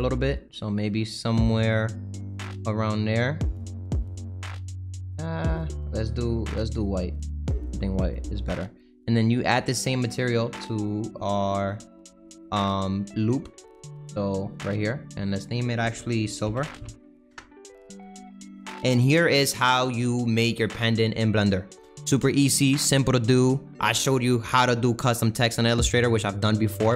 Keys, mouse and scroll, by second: 4.3-7.2 middle drag, 7.2 click, 8.1 click, 8.3 middle click, 9.3 click, 12.4-14.5 drag, 16.7-18.2 drag, 18.2-18.6 scroll down 2, 19.2-19.7 scroll down 1, 19.7-21.2 middle drag, 21.2-21.7 scroll up 3, 21.7-26.9 middle drag.